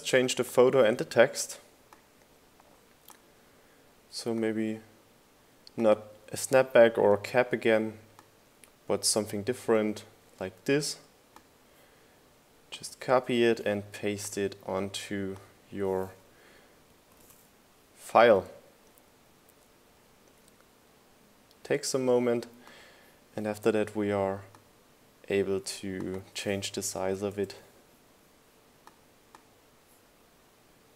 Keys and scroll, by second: 20.6 super+v, 29.0 1, 29.7 Return.